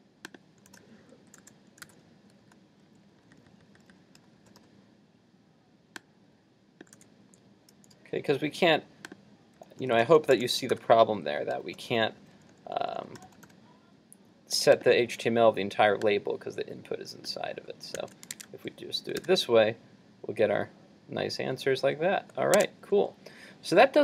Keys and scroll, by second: 2.0 super+v, 7.0 super+x, 10.7 super+v, 18.0 super+s, 18.5 super+Tab, 19.2 super+r, 22.6 super+Tab.